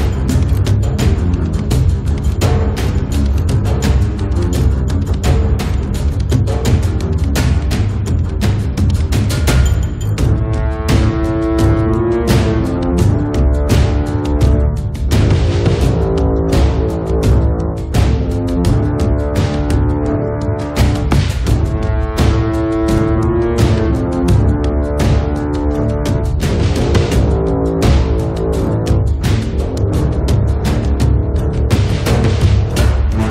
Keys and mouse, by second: 0.6 right click, 1.2 click, 1.7 g, 1.9 f, 3.0 click, 3.7 middle click, 4.3-7.3 drag, 6.0-7.0 middle drag, 6.0-7.0 right drag, 7.1 middle click, 7.5-8.7 drag, 8.7 middle click, 9.0-10.2 drag, 9.5 right click, 10.2 ctrl+z, 10.5-12.4 drag, 12.4-13.6 middle drag, 13.6 ctrl+s, 14.9-17.2 middle drag, 16.2 click, 16.2 right click, 17.0 click, 17.0 right click, 17.6 middle click, 17.8-21.8 drag, 21.8-24.2 middle drag, 24.2 click, 27.0 shift+a, 28.0 click, 28.7 KP_1, 29.3 s, 30.4 click, 30.8-31.9 middle drag, 30.8 right click, 31.3 click, 31.3 right click, 32.5 click, 33.0 middle click, 33.0 right click.